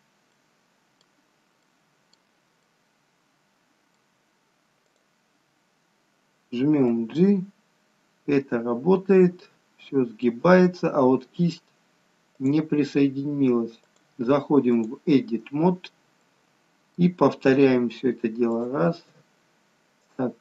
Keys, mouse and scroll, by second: 0.1 scroll up 2, 0.4 middle click, 1.3-1.7 scroll down 2, 1.7 middle click, 2.6 middle click, 4.8 click, 6.9 g, 16.0 scroll up 2, 16.3 middle click, 18.6 shift+click, 20.1 click.